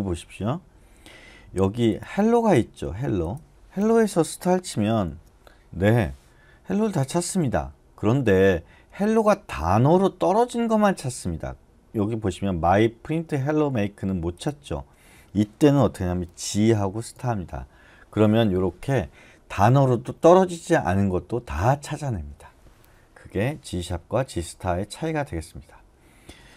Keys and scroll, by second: 4.9 *, 16.3-17.1 typing.